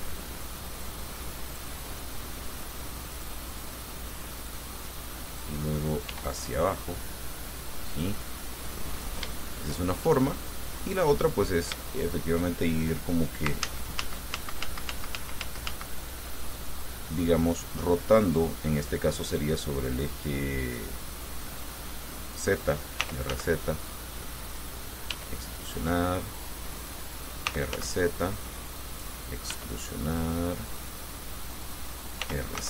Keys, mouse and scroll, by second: 1.8 click, 3.4 click, 3.8 click, 4.6 click, 5.5 right click, 6.4 e, 8.1-9.7 drag, 10.8-11.8 drag, 12.0 shift+click, 13.9 ctrl+z, 20.8-22.7 drag, 23.0-24.0 typing, 24.7 click, 25.3 e, 27.0 click, 27.5-28.4 typing, 29.1 click, 29.7 e, 31.9 click, 32.4 r.